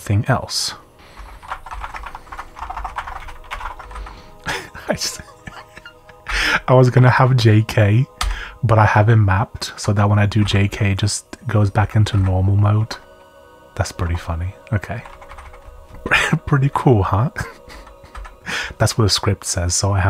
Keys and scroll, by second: 0.9-4.4 typing, 5.7-7.1 typing, 8.2-8.8 typing, 9.8 Escape, 10.1-18.1 typing, 12.7 Escape.